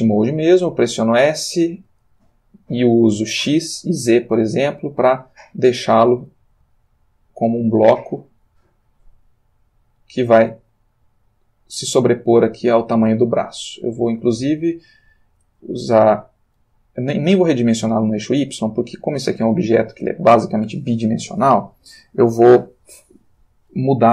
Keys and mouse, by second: 0.4 g, 2.1 space, 5.1-14.4 middle drag, 17.0-22.2 middle drag.